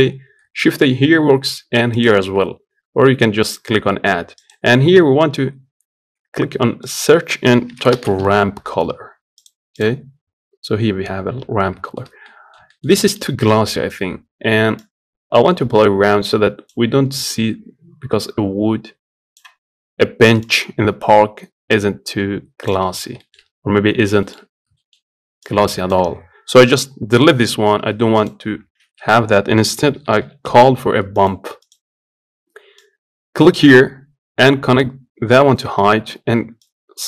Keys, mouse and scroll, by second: 10.6-11.3 scroll up 5, 11.5 scroll up 2, 11.6-13.0 shift+middle drag, 13.0-13.4 scroll up 1, 13.4-14.6 middle drag, 14.6-27.5 drag, 27.5 Delete, 28.8 shift+a, 32.5-35.3 drag, 36.4-37.0 drag.